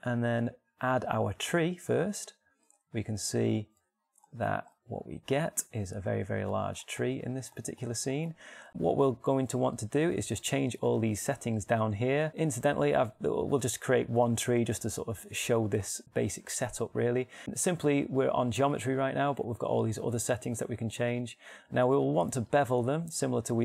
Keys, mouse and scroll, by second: 0.0 shift+a, 5.3 click, 13.1-19.0 middle drag.